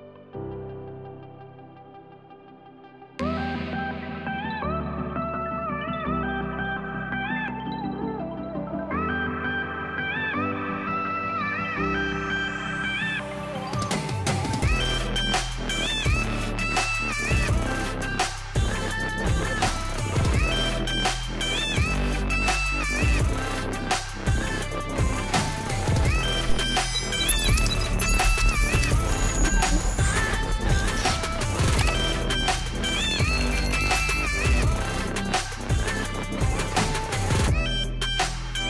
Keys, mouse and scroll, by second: 7.0 click, 8.7 right click, 8.8 right click, 10.0 click, 11.1 click, 11.8 right click, 12.6 click, 13.6 click, 15.9 click, 18.8 click, 19.0 click, 21.1 click, 29.9 click, 36.1 click, 38.4 click.